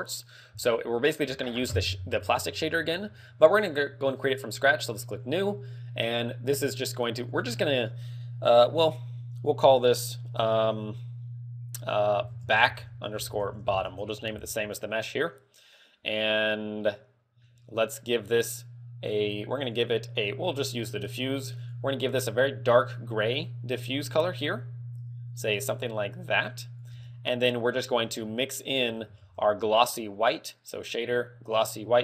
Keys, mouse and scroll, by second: 5.0 click, 6.3 click, 7.4 click, 17.4 middle click, 19.7 click, 21.7 click, 22.9 click, 26.9 click, 27.4 scroll up 5, 27.8 click, 29.3 shift+a.